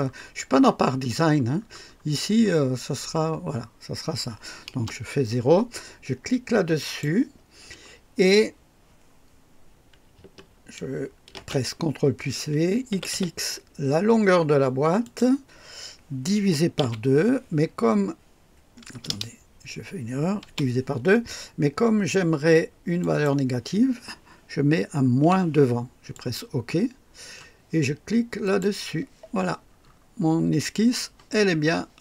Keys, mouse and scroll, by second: 4.6 KP_0, 6.7 click, 11.3 ctrl+v, 12.8 x, 13.1 x, 15.0 click, 16.3 KP_Divide, 16.7 KP_5, 16.7 KP_2, 18.8-20.9 typing, 22.9 click, 25.2 -, 26.1 click, 28.4 click, 29.7-30.0 scroll up 1, 31.3-31.6 scroll down 1.